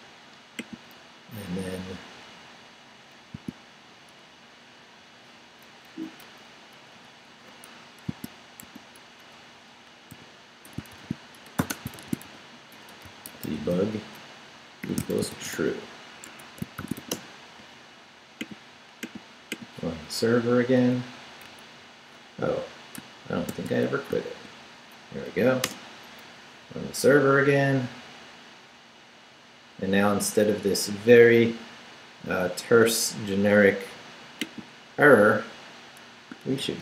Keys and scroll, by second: 1.6 Down, 3.2 shift+Down, 5.9 shift+Down, 8.6 shift+a, 9.5 shift+Left, 10.0 Left, 10.1-17.5 typing, 16.3 Escape, 20.0 Up, 21.4 Down, 23.5 ctrl+c, 25.1 ctrl+Up, 25.6 Return, 36.6 ctrl+r.